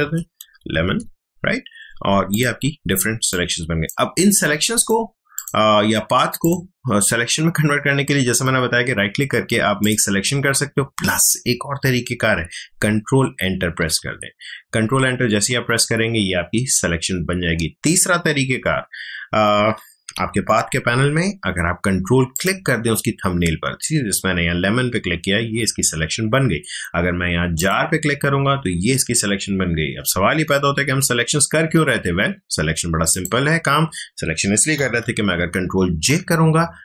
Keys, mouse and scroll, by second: 0.0-1.2 typing, 2.3 click, 3.0 space, 3.3 click, 3.5 space, 4.7 click, 8.4 right click, 9.8 click, 10.8 Escape, 13.3 ctrl+Escape, 19.8 ctrl+Escape, 20.1 ctrl+d, 22.3 ctrl+click, 27.5 ctrl+click, 33.1 click, 35.9 ctrl+j.